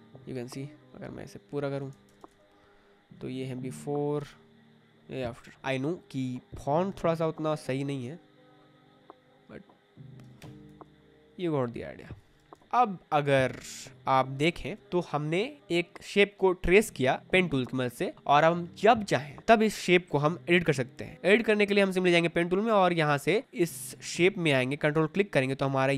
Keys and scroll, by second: 1.6-2.6 typing, 10.3 Escape, 12.5 ctrl+t, 12.6 Return, 13.3 space, 23.4 ctrl+d.